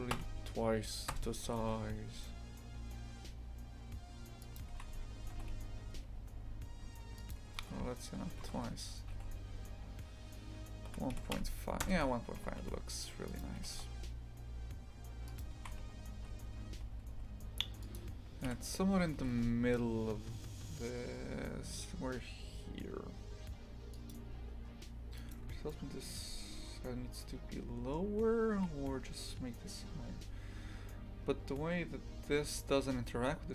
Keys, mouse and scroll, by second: 4.7 shift+f, 7.6 ctrl+z, 8.4 ctrl+z, 9.1 s, 13.6 g, 15.6 shift+f, 18.5 KP_3, 19.2 g, 25.2 right click, 25.7-33.5 shift+middle drag.